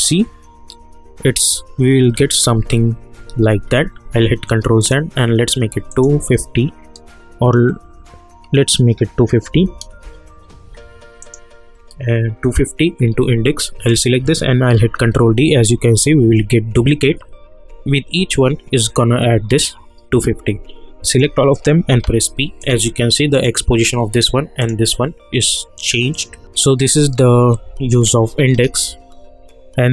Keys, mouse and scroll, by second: 2.5 ctrl+d, 3.5 ctrl+z, 4.8 click, 9.5 Left, 11.2 click, 13.9 click, 14.7 ctrl+d, 21.1 shift+click, 21.9 p, 22.6 click, 28.0 space.